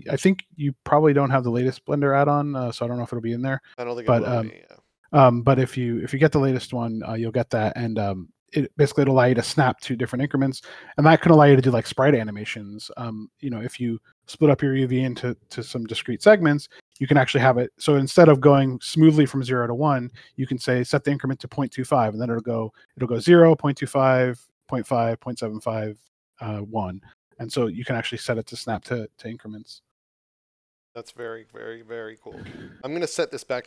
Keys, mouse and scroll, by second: 0.1 click, 2.2 right click, 7.2 click, 10.4 scroll down 1, 12.3 click, 15.1 click, 20.1 click, 23.7 click, 28.1 click.